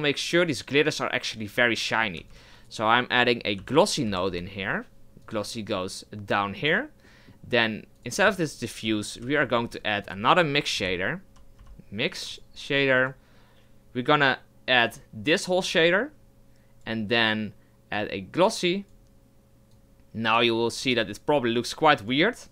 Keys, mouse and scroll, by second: 9.2 Delete, 9.6 shift+a, 14.8 click, 17.9 click, 19.8 click, 22.0 click.